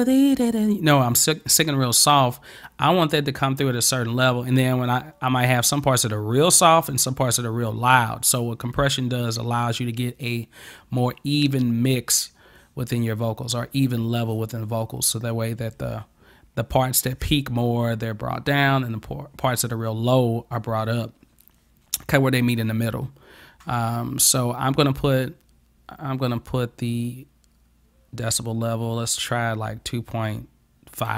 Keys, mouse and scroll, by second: 25.1 click.